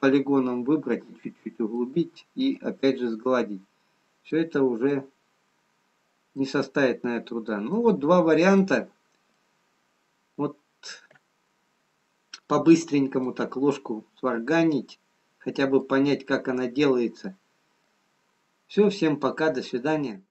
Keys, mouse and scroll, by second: 0.0 Tab, 0.0 middle click, 2.4 middle click, 5.6-7.1 scroll down 2, 7.1 middle click, 7.1-8.0 scroll down 1, 8.5 middle click, 9.8-11.3 scroll down 1, 11.3 middle click, 18.3 middle click, 20.0 scroll down 1.